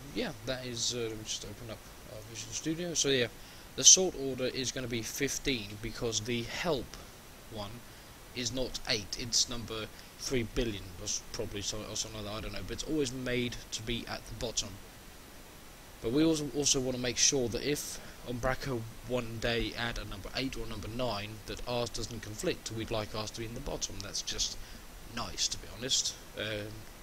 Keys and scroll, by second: 2.3 shift+F10.